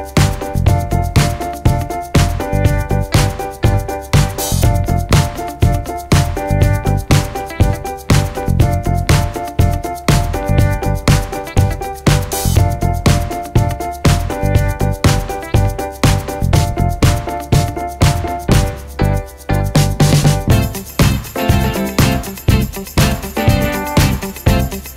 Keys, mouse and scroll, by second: 18.3 shift+click, 22.9 ctrl+g, 23.7 click, 24.3-24.9 shift+drag.